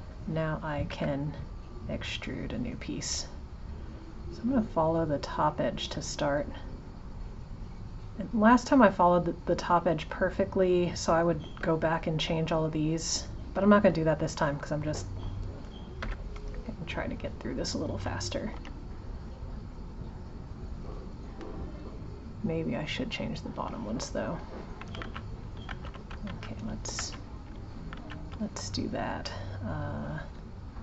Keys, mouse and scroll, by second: 18.5 g, 23.1 click, 25.7 ctrl+z.